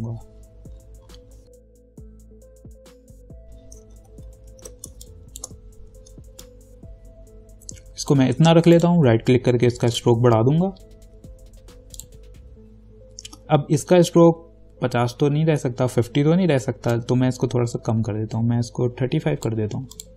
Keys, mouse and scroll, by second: 1.0-2.2 scroll up 1, 2.2 click, 4.2 ctrl+=, 5.1 space, 5.3 click, 5.7 space, 6.6-9.0 shift+drag, 9.0 right click, 10.1 click, 17.1-20.1 drag.